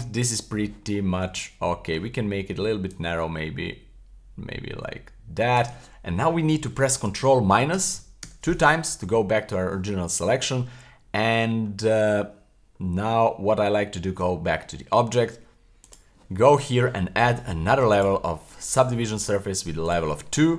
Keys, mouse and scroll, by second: 0.9 middle click, 1.4 middle click, 2.9-5.7 shift+drag, 7.7 super+KP_Subtract, 8.2 super+KP_Subtract, 9.1 middle click, 10.2-11.9 middle drag, 12.8 middle click, 13.2 Tab, 15.8 click, 18.0 click, 19.8 click.